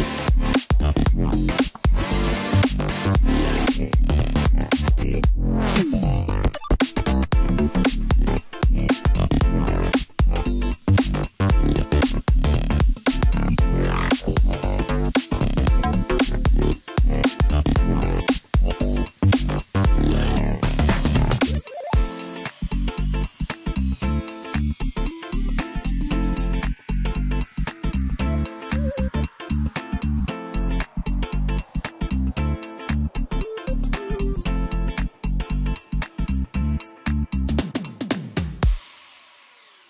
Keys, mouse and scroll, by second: 1.5-2.5 ctrl+KP_4, 3.4 s, 5.6 g, 8.5-8.9 scroll up 1, 9.5 g, 12.2-13.1 scroll down 2, 13.1 s, 16.4-17.2 scroll down 3, 17.2-18.5 scroll up 2, 18.5 ctrl+a, 20.5 click, 21.0 drag, 21.5-22.6 scroll down 2, 24.2-24.9 drag, 25.6-33.3 drag, 33.9-38.2 drag, 38.7-39.8 drag.